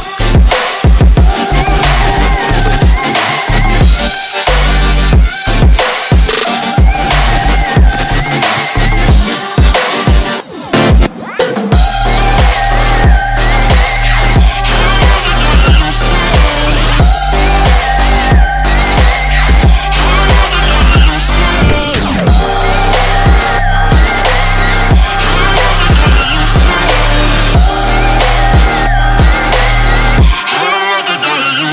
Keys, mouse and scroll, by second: 1.6-3.2 typing, 4.2 click, 7.1-7.5 scroll down 1, 9.3-9.7 scroll up 1, 9.9 click, 10.3-10.6 scroll up 1, 11.8 Tab, 11.8 F10, 12.7 click, 13.6 KP_1, 13.8 KP_0, 14.8 Return, 15.8 click, 16.4 scroll down 1, 17.1 scroll up 1, 18.6 click, 22.2-24.7 typing, 25.3 click, 30.2 ctrl+c, 30.5 ctrl+v, 31.2-31.7 drag.